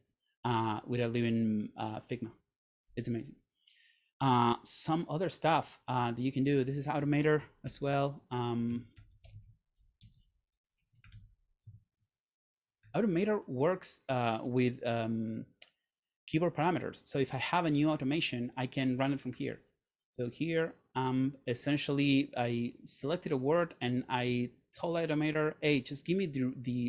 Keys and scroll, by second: 7.7 super+/, 8.6-13.4 typing, 11.9 Tab, 19.6 Return.